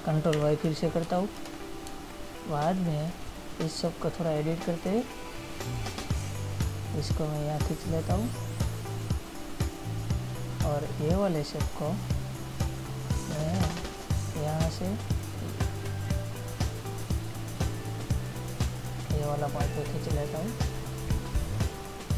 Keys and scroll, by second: 0.7 ctrl+y, 2.2 space.